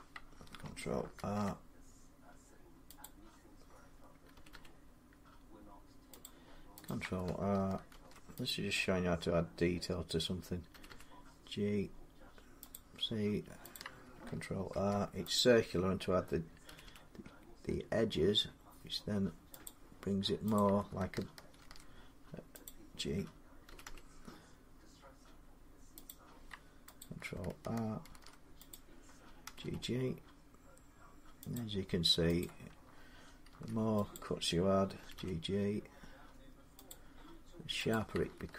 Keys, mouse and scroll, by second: 0.9 ctrl+r, 2.8 click, 4.1 typing, 6.0 click, 6.6 click, 7.7 ctrl+r, 8.1 typing, 8.3 click, 10.5 typing, 12.4 g, 12.5 click, 13.5 click, 14.5 ctrl+r, 14.7 typing, 15.1 click, 16.4 typing, 19.4 click, 20.3 click, 21.3 ctrl+r, 21.3 click, 22.4 click, 23.5 typing, 25.4 g, 25.8 click, 26.9 click, 27.6 typing, 27.8 ctrl+r, 28.5 click, 29.3-30.4 typing, 31.3 click, 32.2 click, 33.3 ctrl+r, 33.5 typing, 33.9 click, 34.8-35.8 typing, 36.7 click, 37.7 click.